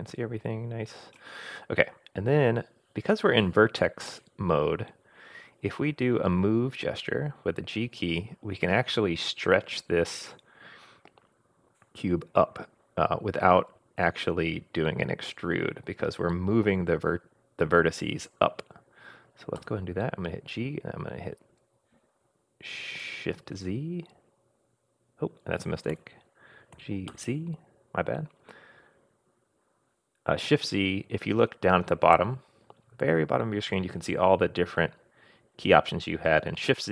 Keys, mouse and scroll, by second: 19.6 g, 26.7 g.